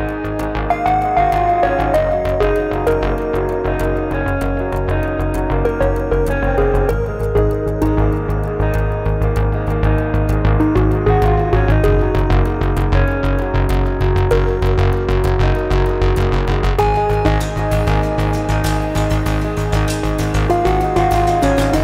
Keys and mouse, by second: 1.3 shift+middle click, 2.6-3.1 drag, 2.6-3.1 middle drag, 3.3-3.8 ctrl+shift+drag, 4.1 click, 4.4 Tab, 4.9 3, 5.1 click, 5.7 shift+click, 6.1-7.1 drag, 8.0 click, 9.3 shift+click, 10.1 click, 11.7-12.8 drag, 14.1-15.9 shift+drag, 16.4 shift+click, 17.6 click, 19.5 3, 21.7 shift+click.